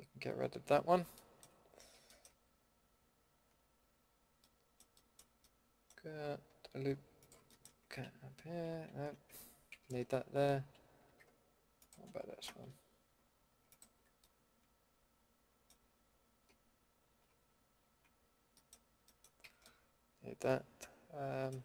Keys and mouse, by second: 4.4-5.4 middle drag, 7.5 middle click, 7.6 click, 8.0 ctrl+x, 9.7 ctrl+z, 11.0 a, 11.8-12.8 drag, 14.7-15.2 middle drag, 17.1 ctrl+x, 17.8 ctrl+z, 19.4 a, 21.0 middle click.